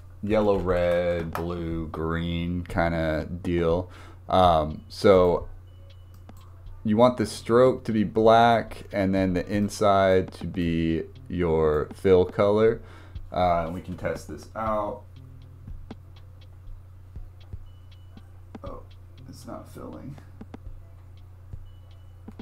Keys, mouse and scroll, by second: 5.1 click, 8.5-9.3 drag, 15.3-19.3 drag, 20.9-22.4 drag.